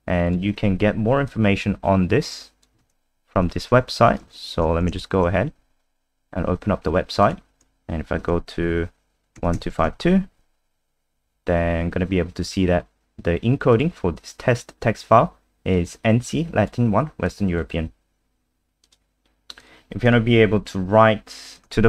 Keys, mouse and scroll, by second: 2.8 ctrl+c, 3.4 super+1, 4.5 ctrl+n, 4.6 ctrl+v, 4.8 Return, 7.2 click, 8.2 ctrl+f, 9.1-10.4 typing, 10.6-11.3 scroll down 2, 13.7 click, 20.3-21.5 scroll down 2, 21.5 click, 21.7 ctrl+c.